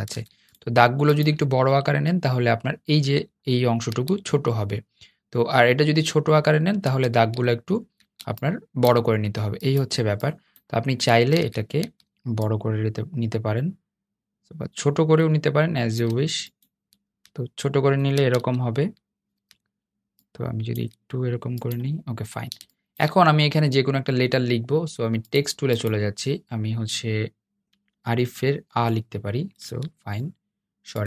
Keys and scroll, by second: 18.1 super+z.